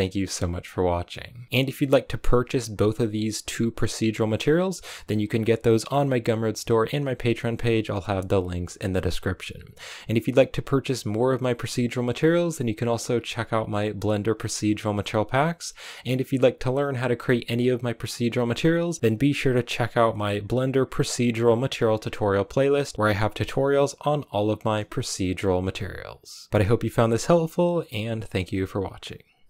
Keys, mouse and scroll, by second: 5.6 right click.